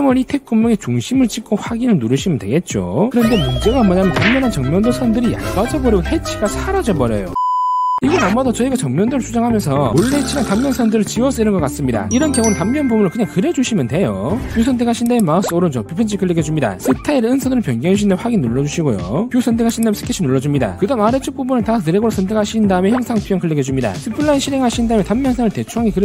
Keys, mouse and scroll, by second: 0.8 click, 1.6 click, 3.3 middle click, 4.7 middle click, 8.1 click, 8.6-9.8 middle drag, 10.0 click, 10.7 middle click, 11.8 click, 12.3 middle click, 13.7 click, 15.0 click, 15.5 right click, 18.4 click, 19.2 click, 19.8 click, 21.4 scroll down 1, 21.6 scroll up 1, 22.2 click, 24.0 click, 24.7 click, 25.3 click.